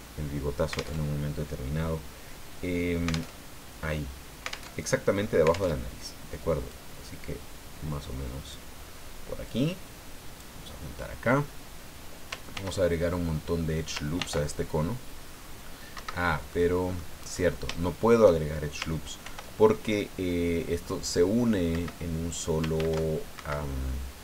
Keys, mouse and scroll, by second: 1.0 alt+Tab, 3.3 alt+Tab, 4.7 alt+Tab, 5.7 alt+Tab, 6.7-8.7 drag, 9.4-10.6 drag, 12.5 ctrl+r, 14.2 ctrl+r, 15.3-15.6 scroll up 2, 15.9 Escape, 16.5 click, 17.8 shift+click, 19.2 ctrl+r, 21.7 Escape, 22.7 ctrl+r, 23.3 ctrl+Escape.